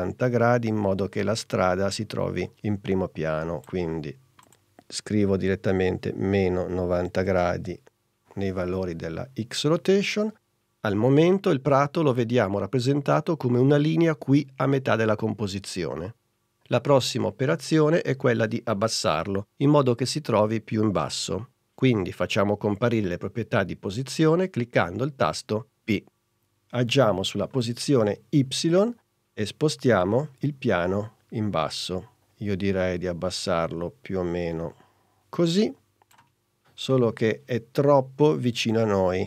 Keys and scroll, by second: 5.3 -, 6.0 9, 6.5 0, 7.4 Return, 26.1 p.